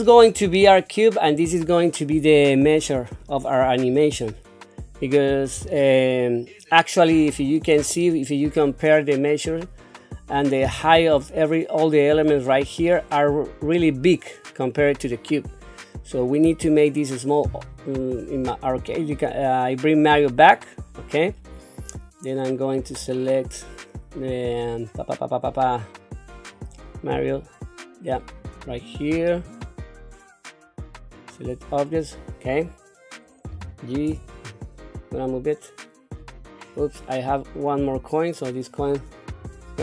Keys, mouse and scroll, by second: 0.5 shift+middle click, 1.6-2.5 scroll down 1, 7.3 shift+middle click, 8.0-11.0 scroll down 1, 18.8 click, 22.3-28.4 right drag, 28.4 click, 29.4-32.5 right drag, 33.5 g, 37.1-37.7 scroll down 2, 37.7 click, 38.3 click, 39.3 Delete.